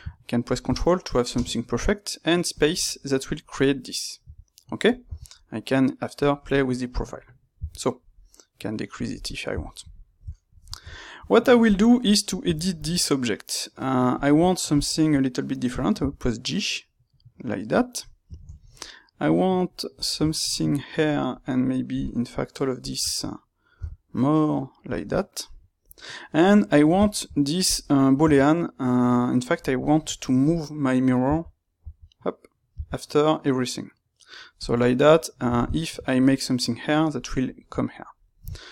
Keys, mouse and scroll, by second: 11.7 click, 11.9-14.1 middle drag, 12.4 Tab, 14.1 click, 14.7 shift+click, 15.9 g, 18.3-19.9 ctrl+middle drag, 19.9 click, 20.9 ctrl+right click, 23.7 g, 24.9 click, 25.8 Tab, 26.5-27.6 middle drag, 27.6 click, 30.5 space, 34.5 click, 34.8-38.7 middle drag.